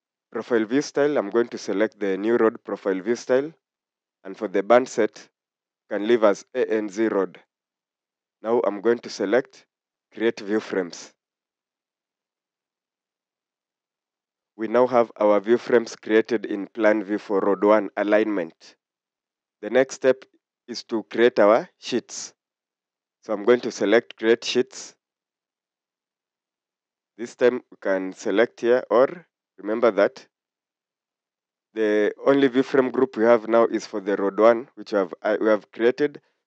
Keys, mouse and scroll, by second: 0.9-1.3 scroll down 1, 10.0 click.